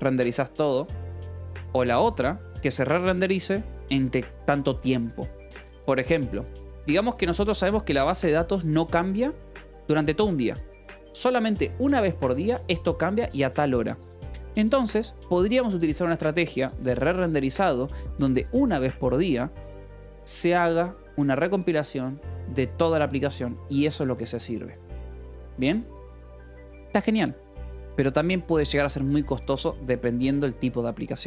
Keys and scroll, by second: 15.7 k, 16.0 j, 16.8 Escape, 18.0 ctrl+s, 29.8 ctrl+s.